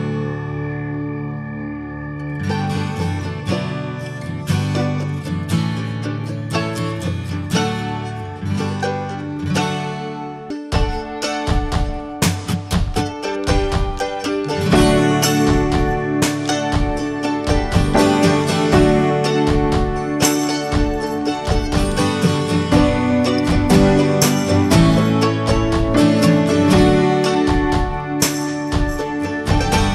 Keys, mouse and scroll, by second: 0.5 middle click, 0.6 scroll up 1, 1.1 2, 1.6 click, 1.9-2.4 scroll up 2, 2.4 alt+shift+click, 2.8 alt+middle click, 3.1 scroll down 2, 3.3 shift+middle click, 3.8 s, 4.6 scroll down 1, 4.9 ctrl+b, 6.9 click, 7.9 Tab, 8.1 click, 8.3 click, 8.5 ctrl+a, 9.0 Tab, 10.1 ctrl+b, 13.2 Tab, 13.3 drag, 13.5 scroll down 2, 13.7 middle click, 14.0 scroll up 1, 14.1 click, 14.6 shift+middle click, 14.8 scroll up 1, 15.0-16.1 middle drag, 16.1 2, 16.4 click, 16.9 alt+click, 17.2 alt+middle click, 17.7 shift+middle click, 17.9 scroll up 2, 18.3 s, 19.6 Tab, 19.9-20.5 scroll down 3, 20.6 shift+middle click, 20.8 click, 21.0 click, 21.1 ctrl+a, 21.6 middle drag, 21.9 scroll up 1, 22.0 Tab, 22.3 shift+middle click, 22.5 scroll up 2, 22.9 3, 23.3 click, 24.0 alt+middle click, 24.4 shift+middle click, 24.6 scroll up 2, 25.0 shift+middle click, 25.6 e, 27.4 click, 28.0 alt+shift+click, 28.8 e, 29.1 alt+s.